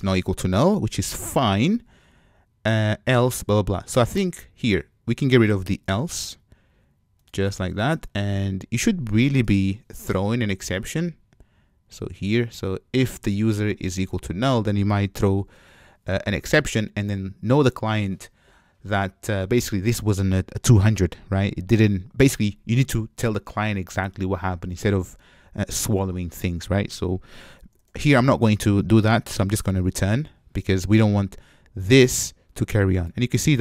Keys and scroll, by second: 9.7 alt+super+l, 15.9 Tab, 29.5 Return.